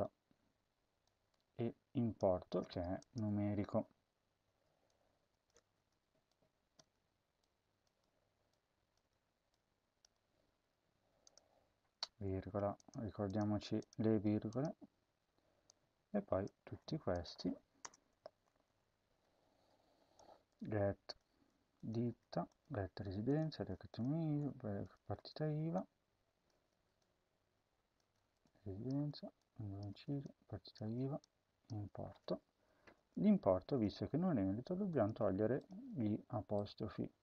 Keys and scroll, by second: 2.1 BackSpace, 3.4 Tab, 5.7 BackSpace, 6.7 BackSpace, 7.8 BackSpace, 8.9 BackSpace, 9.9 BackSpace, 12.1-14.5 typing, 16.5 ctrl+c, 17.7 Return, 18.1 Home, 18.6 ctrl+v, 21.3 ctrl+c, 22.0 ctrl+v, 22.8 ctrl+v, 26.4 ctrl+c, 27.9 ctrl+v, 28.8 ctrl+v, 32.7 BackSpace, 33.6 BackSpace, 37.1 BackSpace.